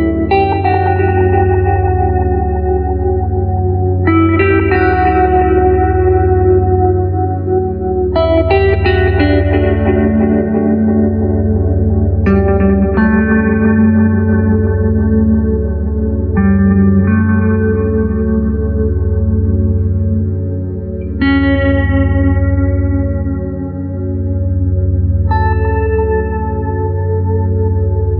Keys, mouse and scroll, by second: 0.5 click, 5.2-6.3 scroll up 1, 6.3-10.7 middle drag, 11.0 click, 14.0 click, 16.8-19.6 middle drag, 19.6-20.3 scroll down 1, 20.3 scroll down 1, 20.6-23.1 drag, 26.7 click.